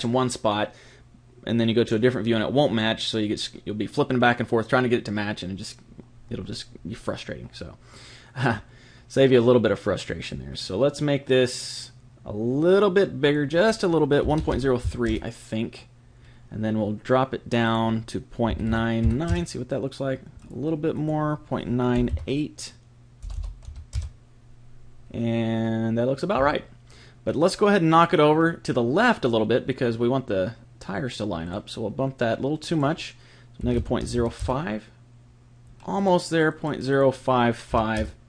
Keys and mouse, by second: 8.5-11.6 middle drag, 13.2 click, 17.6 click, 20.4 click, 23.4 BackSpace, 31.4-34.4 drag, 36.0 click.